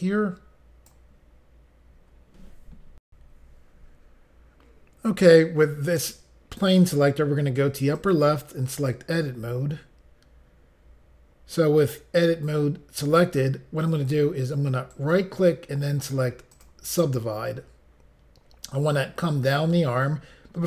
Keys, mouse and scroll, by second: 3.1 Pause, 7.9 click, 8.7 click, 14.9 right click, 16.5 click.